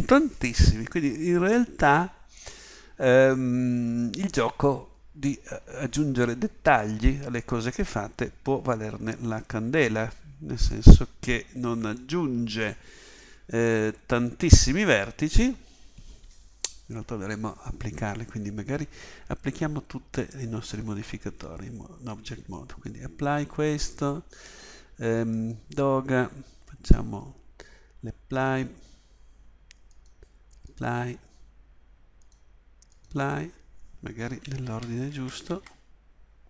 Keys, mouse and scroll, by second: 34.7 ctrl+z, 35.1 ctrl+z.